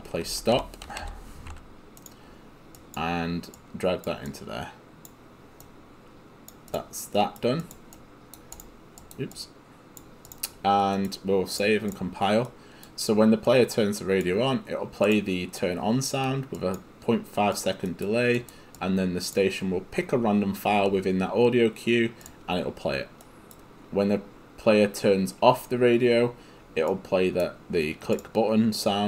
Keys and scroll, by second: 0.1-1.6 typing.